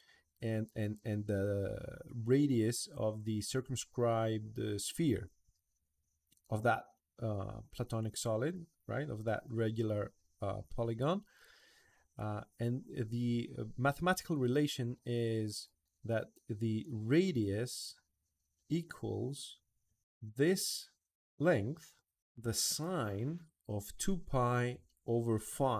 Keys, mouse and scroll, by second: 20.3 click.